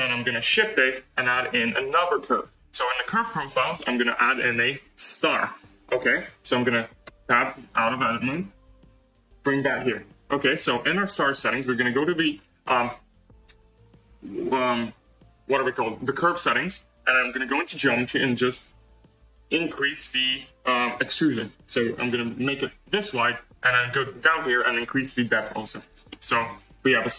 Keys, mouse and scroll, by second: 0.6 shift+a, 7.0 Tab, 7.7 g, 11.2 click, 12.6-13.1 scroll, 14.3-16.3 scroll, 17.5-19.1 drag, 20.9-23.2 drag, 24.9-26.0 drag, 26.0-27.1 middle drag.